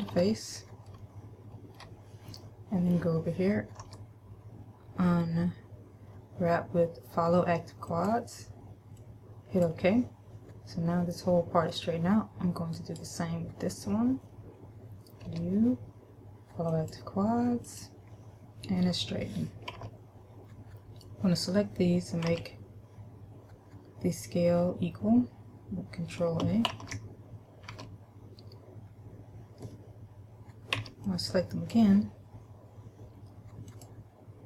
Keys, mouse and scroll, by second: 0.0 KP_Add, 0.3 KP_Add, 1.1 shift+middle click, 4.0 u, 13.0 right click, 15.5 u, 20.0 a, 22.5 a, 27.0 ctrl+a, 28.0 a, 31.0 b, 34.0 click.